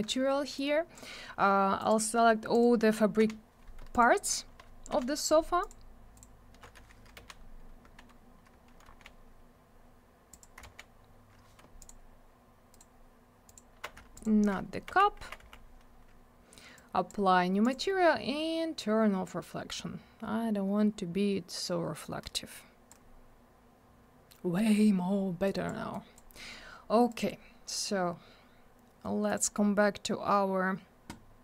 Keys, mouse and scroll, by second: 0.6 click, 1.8 click, 1.9 click, 2.5 click, 2.6 click, 3.2 F4, 3.9 ctrl+click, 4.0 ctrl+click, 4.9 F4, 5.6 ctrl+click, 6.2 ctrl+click, 8.1 scroll up 1, 8.9 alt+w, 9.5 scroll up 1, 10.3 click, 10.6 alt+w, 11.8 ctrl+click, 12.7 ctrl+click, 12.8 ctrl+click, 13.5 ctrl+click, 13.6 ctrl+click, 14.1 alt+click, 14.2 alt+click, 14.9 n, 16.8 click, 17.6 click, 17.7 click, 19.3 click, 25.5 click, 25.9 click, 27.1 click, 27.2 click, 29.3 click, 29.4 click.